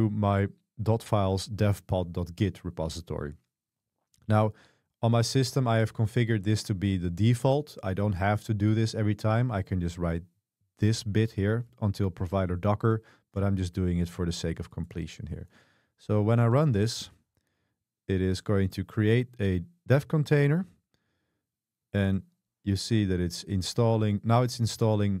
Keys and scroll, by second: 17.8 Return.